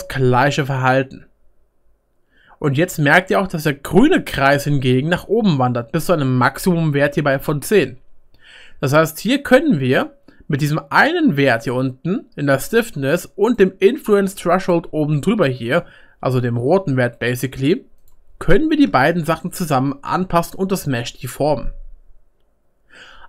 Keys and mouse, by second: 9.0-11.9 middle drag, 15.7-21.7 middle drag, 18.0-21.7 drag, 18.0-21.7 right drag, 20.8 ctrl+z.